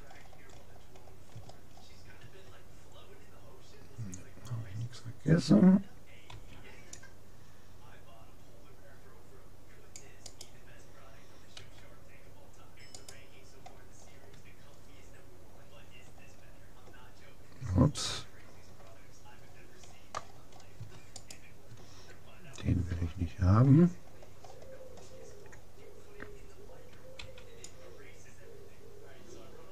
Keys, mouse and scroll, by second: 0.1-0.6 scroll down 1, 1.5-2.9 middle drag, 6.3 c, 11.6 s, 15.1-16.7 middle drag, 18.2 a, 19.5-21.3 middle drag, 21.3-22.9 right drag, 23.3-26.3 middle drag, 27.2 c.